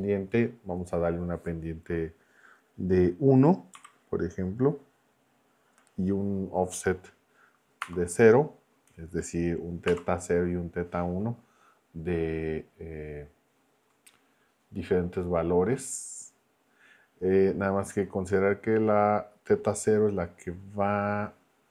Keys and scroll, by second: 3.7 1, 7.8 ,, 9.9 0.